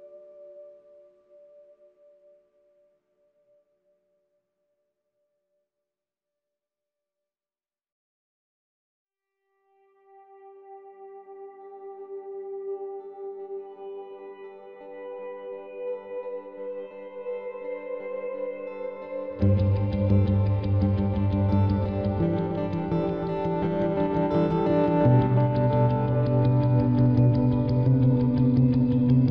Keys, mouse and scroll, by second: 0.0 b, 0.4 g, 1.7 b, 2.0 g, 3.6 ctrl+r, 5.3-7.1 right drag, 5.6 b, 5.9 g, 7.7-9.5 right drag, 7.8 b, 8.2 g, 10.6 ctrl+r, 11.8-13.4 right drag, 12.0 b, 12.4 g, 13.4 ctrl+r, 13.5 right click, 14.4 right click, 14.6 b, 15.2 g, 17.6 ctrl+r, 19.5 right click, 20.1 KP_Decimal, 20.5 middle click, 21.9 b, 22.3 g, 24.2-26.0 right drag, 24.4 b, 24.7 g, 26.8-29.3 right drag, 27.4 b, 27.7 g.